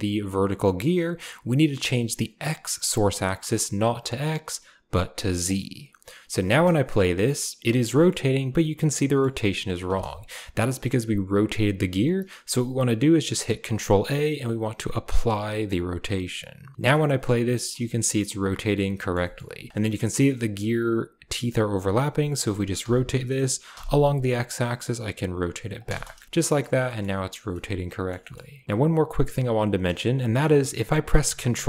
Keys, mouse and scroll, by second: 3.8-5.5 drag, 6.4 space, 6.9 click, 7.8 click, 9.0 click, 9.8 space, 13.7 ctrl+a, 16.7 space, 17.1-17.7 middle drag, 17.9 shift+middle click, 19.0 middle click, 19.2 shift+middle click, 22.7 r, 25.8 space, 26.2 shift+middle click, 26.8 shift+middle click, 27.5-28.0 middle drag, 28.2 shift+middle click, 28.6-29.6 drag, 28.6 space, 30.4 ctrl+a.